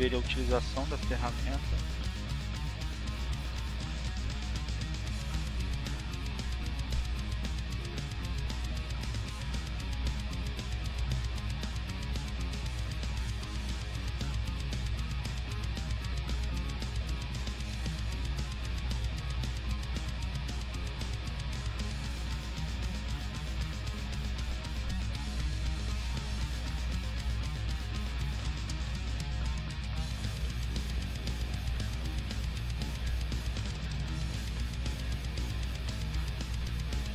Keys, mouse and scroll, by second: 3.5-5.0 drag, 5.1-6.7 drag, 6.8-7.8 drag, 8.3 click, 11.7-14.7 drag, 15.2-16.5 drag, 17.3 click, 24.1-26.4 drag, 26.5 click, 27.9 click, 31.0-33.0 drag, 33.6-34.9 drag, 35.3 click.